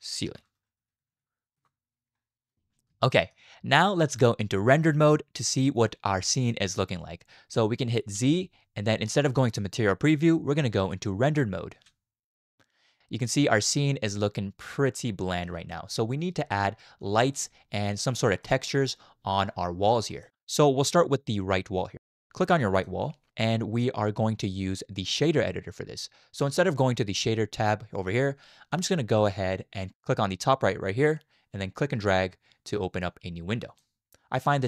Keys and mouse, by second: 3.1 shift+drag, 6.5 shift+middle click, 8.1 z, 13.0-15.4 middle drag, 15.8 shift+middle click, 17.2 shift+middle click, 18.4 middle click, 20.2 shift+middle click, 22.7 click, 31.1-33.8 drag.